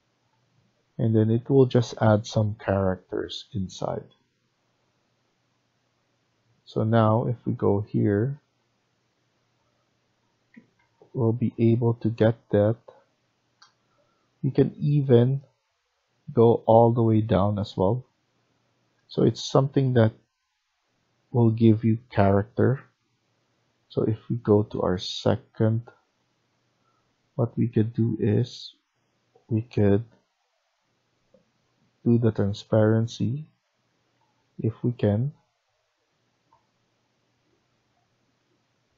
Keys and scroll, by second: 10.4 Escape, 10.7 Escape, 33.6 Escape, 33.8 Escape, 34.1 Escape.